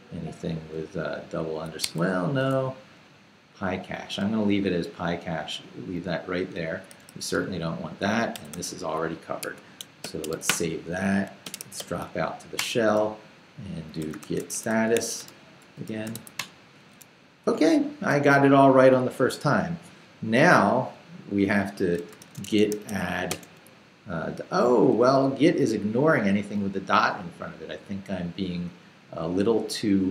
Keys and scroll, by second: 0.0-0.2 typing, 1.8 Escape, 2.0 u, 4.3 j, 6.9 d, 8.3 d, 9.4 Escape, 10.0-12.3 typing, 10.5 Return, 12.6 Return, 13.8-16.6 typing, 21.8-23.3 typing, 25.0 BackSpace.